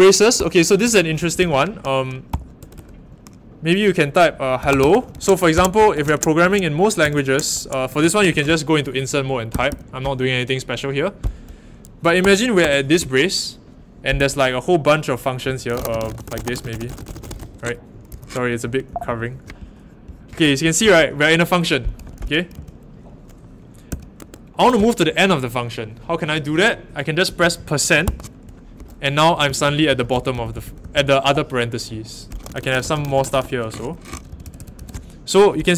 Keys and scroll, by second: 0.1-2.7 typing, 4.6-8.0 typing, 7.0 Return, 7.1 Return, 8.2 Escape, 9.5 typing, 12.2-12.6 typing, 14.1 i, 15.2-19.4 typing, 18.1 Escape, 20.4-20.8 typing, 22.0-22.5 typing, 23.6-25.0 typing, 28.0 shift+5, 29.2-34.7 typing.